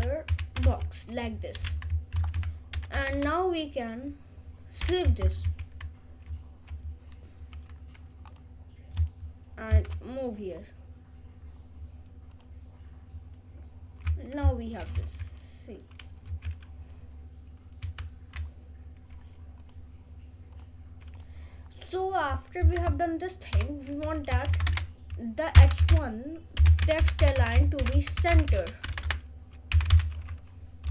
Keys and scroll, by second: 0.0-1.2 typing, 2.1 ctrl+s, 4.0 BackSpace, 4.8 ;, 5.4 ctrl+s, 22.6 Return, 24.5 shift+[, 24.7 Return, 25.8-29.7 typing.